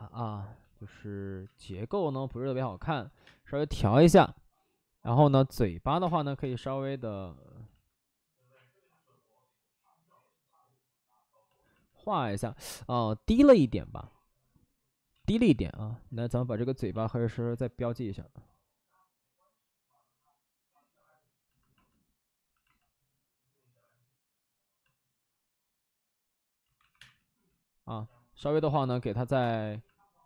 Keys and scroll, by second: 1.3 space, 2.5 alt+s, 2.9 alt+s, 3.2 space, 3.7 space, 5.9 5, 5.9 space, 6.3 space, 7.6 ctrl+z, 9.6 ctrl+z, 15.0 ctrl+z, 15.2 ctrl+z, 15.4 ctrl+z, 15.6 ctrl+z, 16.0 ctrl+z, 26.6 ctrl+z, 26.8 1, 26.9 space, 28.3 ctrl+z, 28.4 ctrl+z, 29.2 5, 29.3 space.